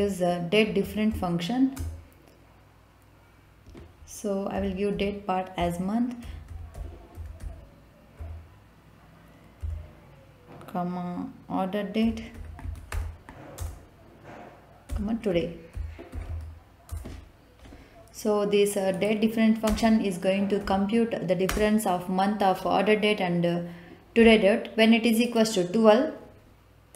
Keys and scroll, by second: 0.6 Down, 1.7 Return, 4.5 ', 5.5 Left, 6.2-7.4 typing, 8.1 Right, 9.6 ,, 12.0-12.8 typing, 13.5 Return, 14.8-16.2 typing, 16.8 Return, 19.6 space, 20.5 =, 21.4 space.